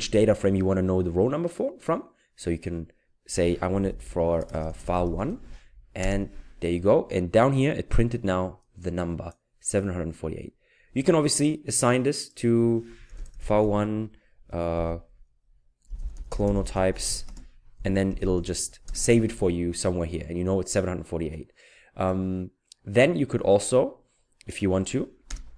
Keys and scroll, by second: 3.5-5.8 typing, 6.0 ctrl+Return, 13.1-13.6 typing, 14.7 typing, 15.9-18.1 typing, 18.9 ctrl+Return, 25.3 Return.